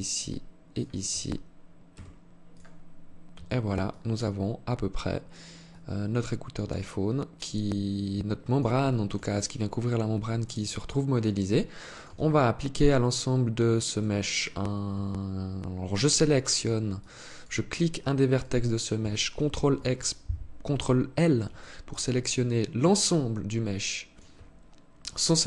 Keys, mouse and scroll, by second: 0.2 shift+right click, 1.4 x, 2.8 Tab, 3.4 alt+click, 5.2 alt+click, 8.4 alt+shift+click, 8.9 alt+click, 11.7 Tab, 13.4 right click, 16.5 alt+click, 17.9 right click, 19.1 ctrl+l, 19.3 ctrl+l, 21.1 alt+click.